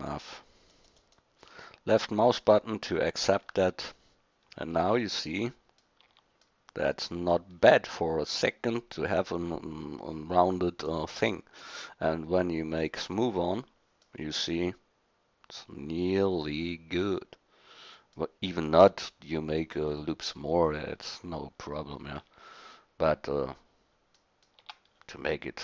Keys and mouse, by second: 1.5-4.4 drag, 4.4 middle click, 5.2 middle click, 6.0 Tab, 11.3-13.1 drag, 13.9-14.8 middle drag, 15.1 middle click, 15.5 middle click, 15.7 middle click, 15.9 middle click, 21.6-22.2 middle drag, 22.2 Tab, 24.3 middle click, 24.6 Tab.